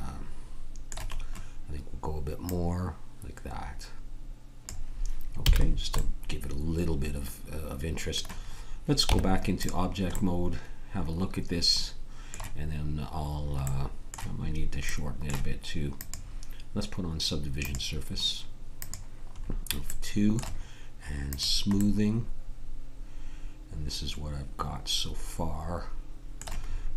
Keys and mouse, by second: 1.1-2.5 middle drag, 2.5-4.6 drag, 5.4 a, 5.6-6.8 drag, 9.1 Tab, 18.8-20.7 drag, 20.7 middle click, 21.3-23.1 drag, 23.1 middle click.